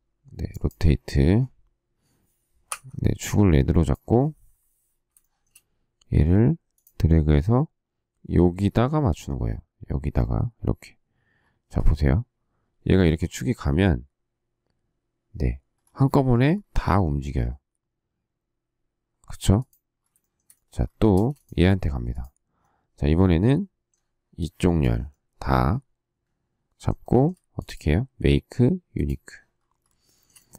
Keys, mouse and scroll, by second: 5.2 shift+middle click, 20.1 shift+middle click, 21.1 space, 27.0 shift+middle click, 30.0 shift+middle click.